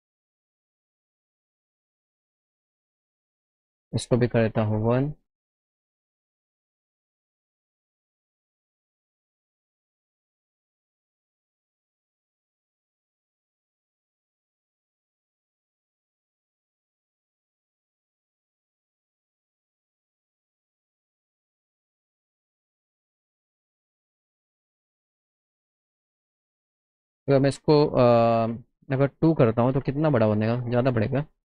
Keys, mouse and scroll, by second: 2.0 KP_4, 3.5 click, 6.6 click, 8.9 click, 20.1 click, 21.0 KP_1, 21.2 KP_0, 22.4 middle click, 22.9 middle click, 23.6 middle click, 24.4 middle click, 25.5 click, 27.2 click, 29.8 Down, 29.9 Right.